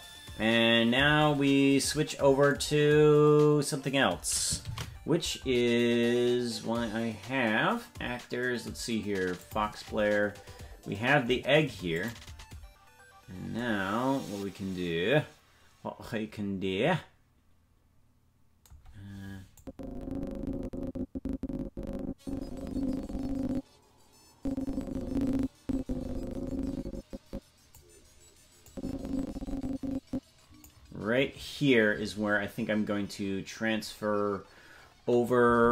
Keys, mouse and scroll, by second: 0.4 ctrl+s, 6.8 ctrl+s, 9.4 click, 9.4-11.8 scroll down 5, 11.9 click, 19.5-27.7 drag, 28.7-30.6 drag, 35.6 ctrl+Tab.